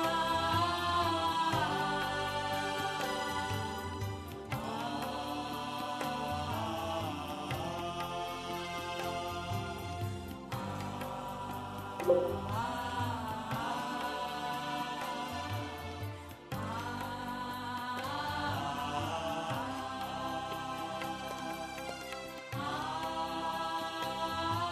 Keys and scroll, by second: 0.0 Left, 1.5 shift+Right, 1.8 Left, 1.9 Left, 2.0 Left, 2.1 Left, 2.7 Left, 3.2 s, 4.0 Right, 5.7 ctrl+KP_Subtract, 8.1 ctrl+g, 8.4 ctrl+space, 11.6 alt+space, 11.9 alt+space.